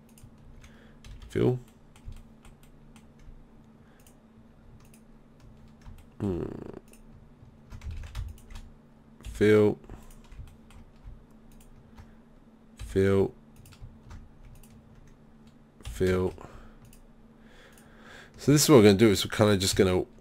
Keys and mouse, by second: 1.1 f, 1.7 click, 6.0 click, 8.0 ctrl+z, 9.3 f, 12.8 f, 15.9 f, 16.1 right click, 18.7 middle click, 19.7 f.